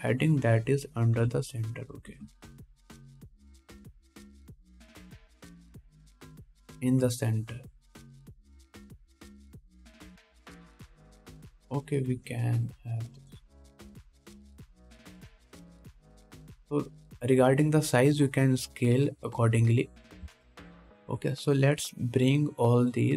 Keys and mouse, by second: 2.4 s, 3.3 g, 6.3 KP_1, 7.7 g, 11.2 right click, 13.3 s, 14.9 g, 17.6 ctrl+s, 20.4 middle click, 20.4 right click, 22.3 ctrl+s.